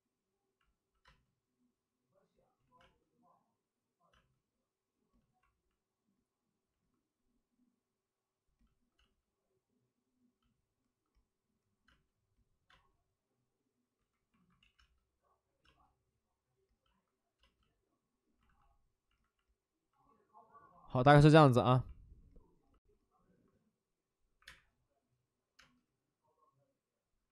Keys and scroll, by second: 0.9 space, 2.5 ctrl+z, 2.7 space, 4.0 space, 8.3 space, 8.9 space, 11.8 space, 12.6 space, 14.3 alt+s, 14.5 ctrl+z, 14.7 space, 18.4 alt+s, 24.3 1, 24.4 space.